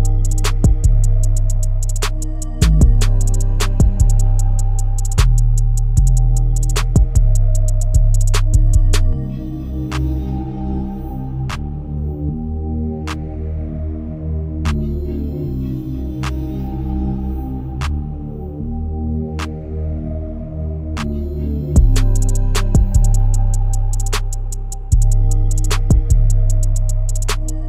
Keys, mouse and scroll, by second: 3.8 scroll up 3, 6.5-11.2 drag, 11.2-12.0 scroll down 4, 12.0-12.6 scroll up 1, 12.6-13.0 scroll down 1, 13.0-15.1 scroll up 3, 15.1 scroll up 1, 15.3-16.0 scroll down 4, 16.0 middle click, 17.0 click, 17.7 KP_7, 18.3 scroll down 5, 19.6 g, 21.6 g, 21.8 KP_0, 22.3-23.4 scroll up 4, 23.4-24.7 scroll up 1, 24.7-27.6 drag.